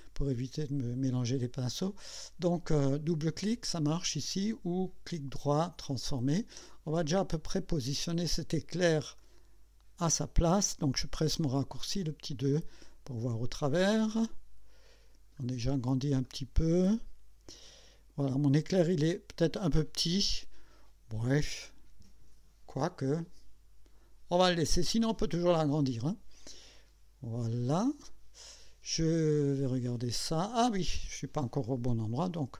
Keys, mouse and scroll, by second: 5.1 right click, 5.9 click, 7.1-8.2 drag, 9.2-10.4 drag, 12.8-15.2 drag, 15.4 scroll up 1, 16.2-17.2 right drag, 27.8 click, 29.2-31.2 drag, 32.4 KP_2.